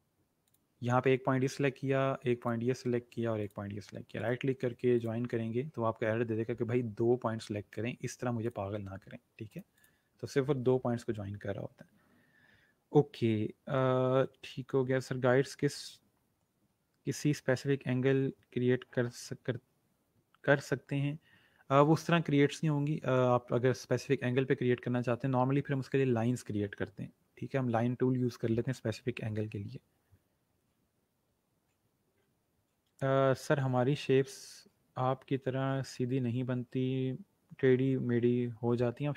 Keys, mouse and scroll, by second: 2.3 shift+click, 4.1 right click, 4.9 click, 8.4 click.